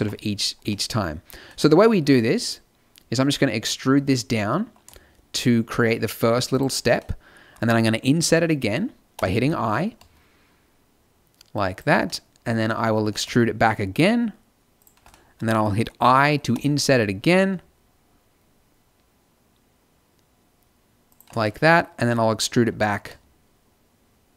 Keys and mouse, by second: 0.6 middle click, 3.7 e, 9.1 i, 12.0 click, 12.9 e, 14.4 click, 16.4 i, 22.4 e.